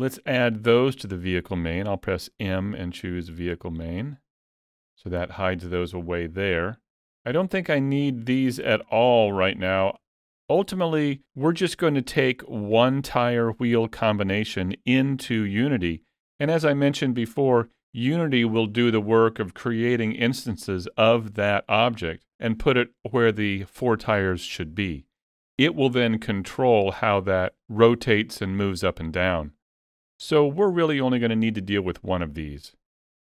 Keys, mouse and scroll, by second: 0.5 shift+middle click, 2.1 m, 7.7 click, 8.2 middle click, 9.0 shift+middle click, 9.4 middle click, 10.1 shift+middle click, 10.4 shift+scroll up 1, 11.9 shift+middle click.